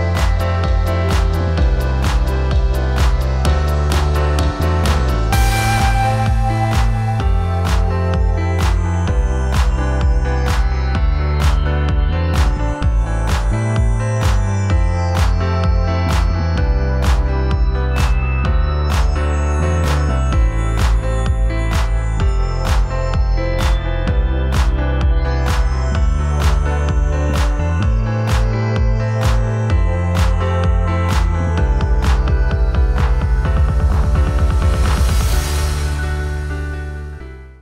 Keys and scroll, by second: 0.6 ctrl+t, 1.6 ctrl+t, 12.9 ctrl+t, 18.1 space, 19.1 f, 24.1 ctrl+t, 28.1 Right, 29.0 Left.